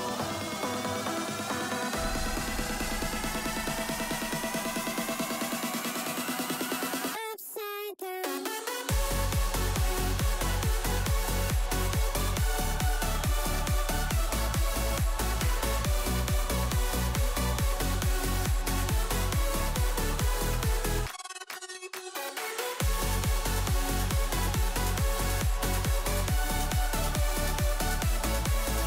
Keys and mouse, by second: 0.3 drag, 1.9-3.9 drag, 4.8 click, 5.3-7.0 drag, 10.9 click, 14.5 ctrl+s, 17.1 click, 21.3 click, 22.0 h, 23.0 ctrl+z, 24.4 KP_7, 25.6 f, 26.5 g, 28.4 KP_0.